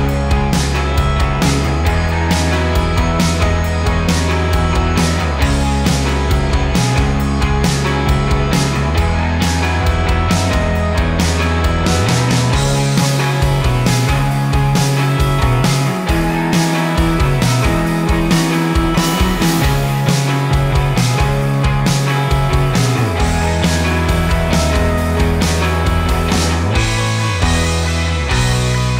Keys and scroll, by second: 6.2 ctrl+j.